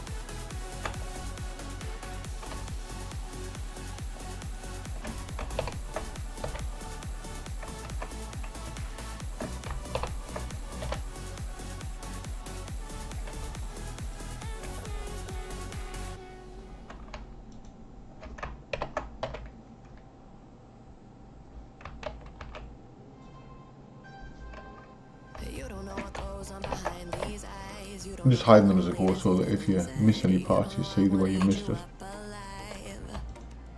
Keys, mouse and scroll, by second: 0.5 shift+click, 2.7 shift+click, 3.5 shift+click, 4.4 shift+click, 5.7 ctrl+j, 6.5 h, 8.1 ctrl+z, 8.8 shift+click, 10.0 ctrl+j, 10.9 h, 11.3 click, 13.6 shift+click, 14.0 shift+click, 17.5 shift+click, 18.8 ctrl+j, 19.3 h, 22.0 ctrl+x, 22.7 ctrl+z, 25.5 shift+click, 26.7 ctrl+j, 27.2 h, 27.6 click, 29.2 shift+click, 29.5 shift+click, 30.4 shift+click, 30.9 shift+click, 33.3 shift+click.